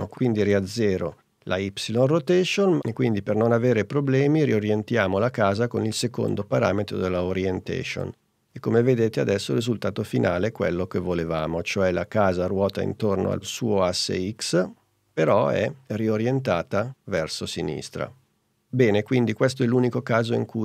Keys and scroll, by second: 0.7 0.